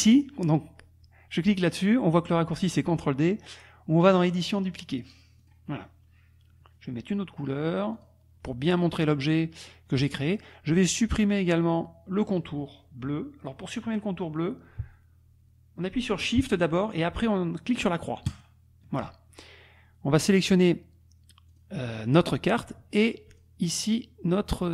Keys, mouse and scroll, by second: 4.1 click, 5.5 click, 7.9 click, 18.4 shift+click, 20.4 click, 21.5 click, 22.0 click, 23.3 shift+click, 23.7 shift+click.